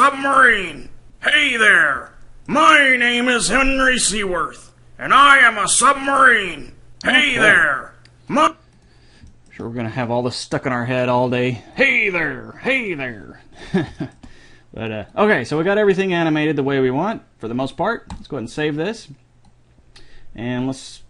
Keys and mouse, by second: 1.7-4.9 drag, 8.5-10.8 drag, 10.5 middle click, 11.9-13.7 drag, 15.3-18.7 drag, 19.7 click, 20.4 click, 20.6 click.